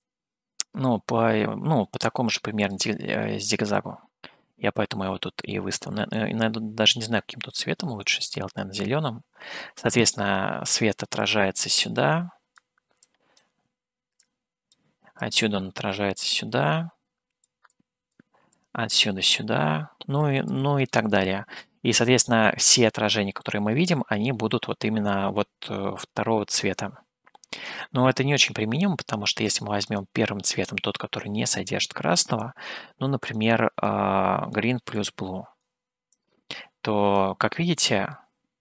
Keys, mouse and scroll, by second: 2.7 click, 11.3-12.5 drag, 13.5 click, 14.3 click, 15.2-17.5 drag, 17.7 click, 18.5-20.2 drag, 20.5 click, 29.9 click.